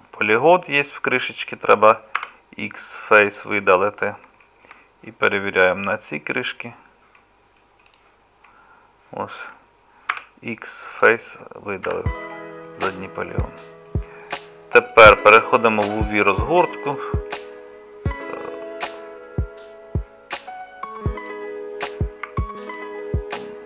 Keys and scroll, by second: 2.2 x, 10.2 x, 11.9 z, 22.3 Tab.